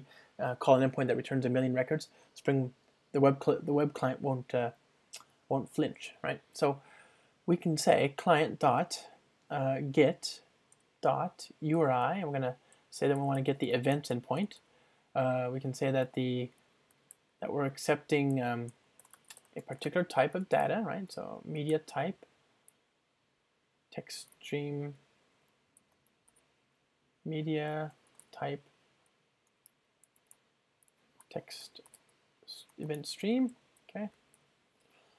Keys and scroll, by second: 8.4 Return, 10.9 Return, 18.8 Return, 29.6 Return, 30.2 ctrl+alt+shift+Left, 32.7 Return.